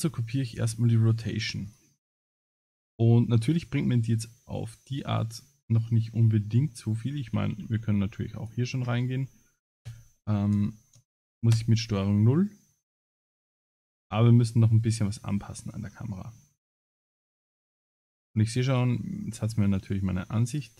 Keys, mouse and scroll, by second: 1.7 click, 2.5 middle click, 7.1 g, 9.8 KP_0, 10.5 KP_0, 11.6 KP_0, 13.2 ctrl+KP_0, 14.0 Escape, 14.6 middle click, 15.4-16.2 scroll down 11, 16.2 middle click.